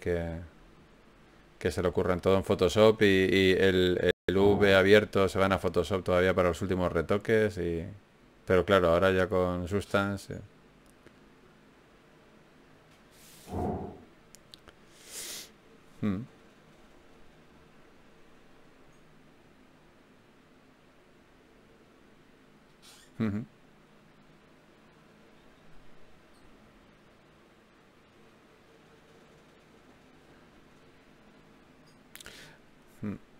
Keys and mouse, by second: 0.4 f, 1.0 ctrl+Tab, 2.6 f, 6.0 f, 10.9 ctrl+Tab, 13.6-15.2 right drag, 14.8-18.1 drag, 23.1 ctrl+Tab, 24.5 f, 26.1 f, 27.5 ctrl+Tab, 31.5-33.3 drag.